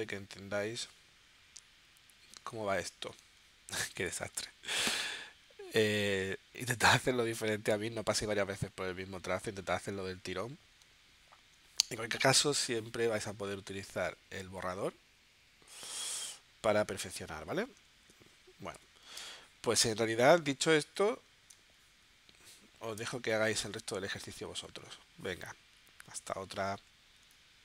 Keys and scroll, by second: 3.2 space, 4.4 space, 10.8 space, 18.8 v, 21.0 z, 21.5 space.